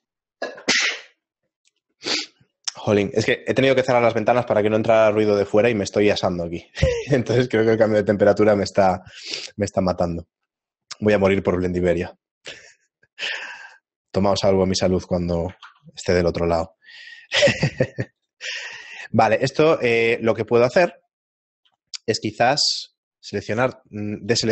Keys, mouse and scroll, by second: 6.7 middle click, 10.5 middle click, 11.2 b, 14.1 middle click, 15.6 ctrl+Tab, 19.3 middle click, 21.7 b, 24.4 right click.